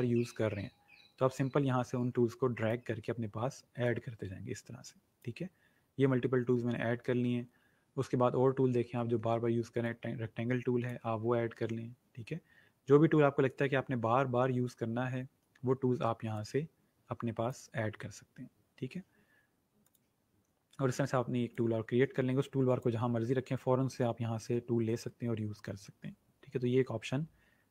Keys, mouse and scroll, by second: 1.3 click, 6.8-7.7 scroll down 1, 8.8-9.8 scroll up 1, 9.8 click, 12.0-12.3 scroll down 1, 15.0 scroll up 1, 16.3 click, 19.8 click.